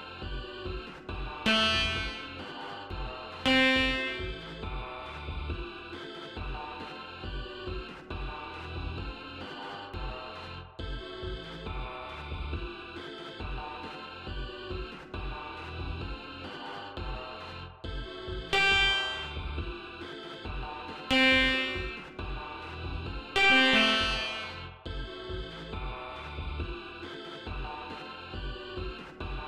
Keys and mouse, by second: 1.4 click, 3.4 ctrl+click, 3.7 ctrl+right click, 5.0 click, 10.8 ctrl+z, 15.7-17.3 drag, 18.4-19.7 drag, 21.0 click, 23.2-24.2 drag, 24.9 right click, 27.4 click.